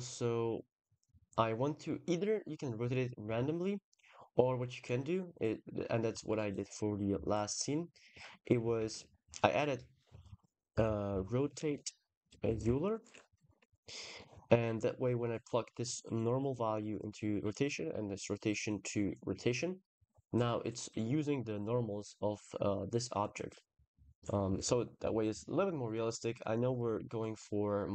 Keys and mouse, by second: 2.2 click, 4.4 click, 5.0 click, 5.5 click, 5.9 g, 6.9 g, 8.6 shift+a, 14.9 click, 17.2 click, 20.6-21.0 middle drag, 21.1 middle click, 23.1-23.8 middle drag, 24.4 ctrl+s, 25.4 KP_0, 26.2 click.